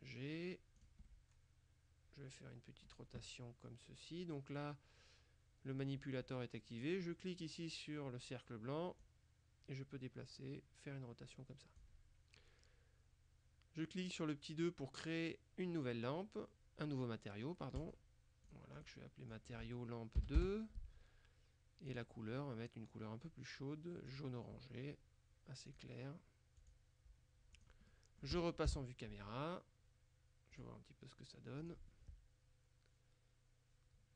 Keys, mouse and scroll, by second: 0.9 click, 1.1 scroll down 1, 1.2 middle click, 9.1-12.4 drag, 17.9 click, 18.6 click, 20.2 KP_2, 20.4 KP_Enter, 22.0 click, 24.2 click, 25.8 click, 26.7 click, 27.6 click, 28.0 middle click, 28.8 KP_0, 30.6 click, 31.7 click.